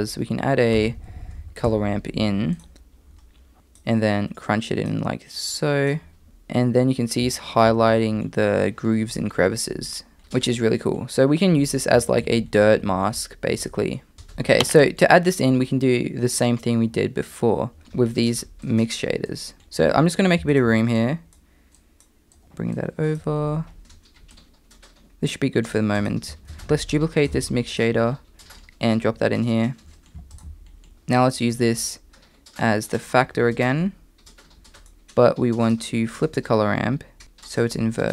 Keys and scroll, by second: 0.8 BackSpace, 1.0 BackSpace, 10.2 Tab, 10.2 i, 10.2 e, 14.1 typing, 22.4 g, 23.8 g, 26.5 shift+a, 27.4 shift+d, 30.9 m.